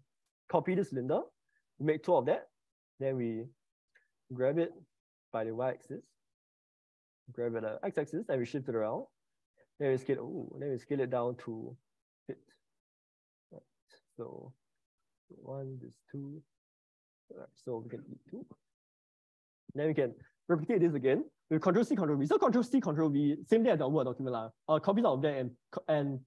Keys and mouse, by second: 0.7 ctrl+c, 1.3 ctrl+v, 1.5 ctrl+v, 3.9 g, 5.3 y, 7.5 g, 7.7 x, 9.5 s, 13.7 click, 14.0 click, 18.3 Delete, 19.3 ctrl+c, 19.7 ctrl+v.